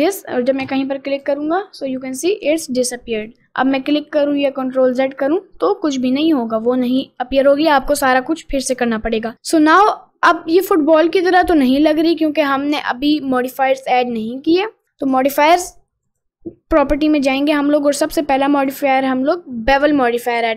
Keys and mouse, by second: 0.7 click, 3.2 click, 10.8-12.9 middle drag, 14.1 middle click, 16.2 click, 18.8-20.5 drag.